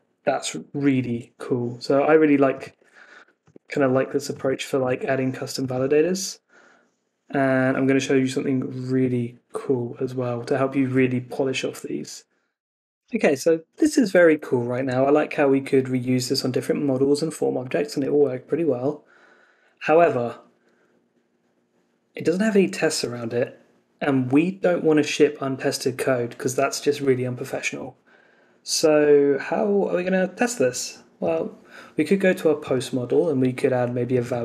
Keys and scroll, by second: 1.0 super+Tab, 3.1 Escape, 4.8 super+s.